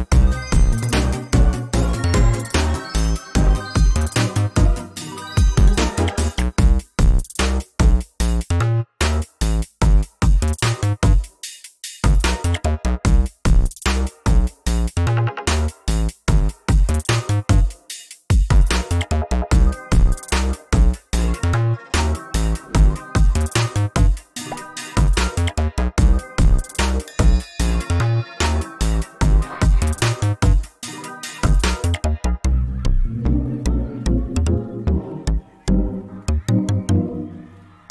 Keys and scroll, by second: 16.1 ctrl+z, 18.0 ctrl+space, 21.3 ctrl+space, 22.5 ctrl+space, 23.5 ctrl+alt+space, 24.6 ctrl+space, 26.0 ctrl+alt+space, 27.1 ctrl+space, 28.2 ctrl+space, 33.7 ctrl+space, 34.7 ctrl+f, 35.9 ctrl+space, 37.1 ctrl+space, 37.7 ctrl+alt+space.